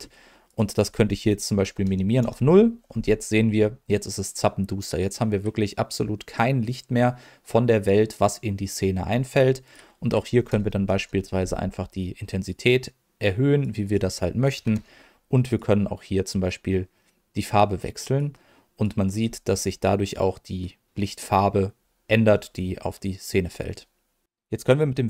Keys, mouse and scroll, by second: 0.4-2.2 drag, 9.6-11.0 drag, 12.5-13.6 drag, 13.8 click, 15.5 click.